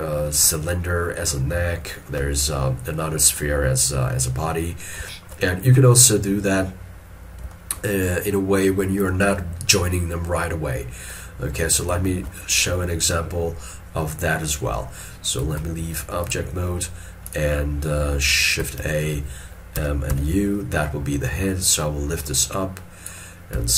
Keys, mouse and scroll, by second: 0.4 shift+middle click, 5.2 shift+middle click, 7.6 shift+middle click, 11.3 middle click, 12.1 shift+middle click, 12.5 shift+middle click, 15.5 ctrl+Tab, 18.9 shift+a, 21.0 scroll down 1, 23.6 s.